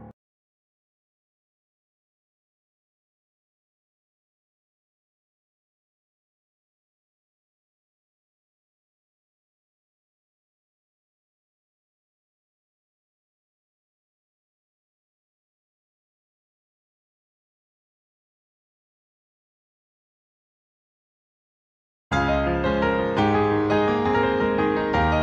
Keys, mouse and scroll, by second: 0.9 shift+middle click, 3.6 click, 7.2 click, 8.4 click, 10.2 scroll up 1, 11.4 click, 12.8 ctrl+z, 13.3 click, 14.5-16.2 ctrl+scroll up 9, 16.2 s, 18.7 r, 21.0 g, 23.3 r.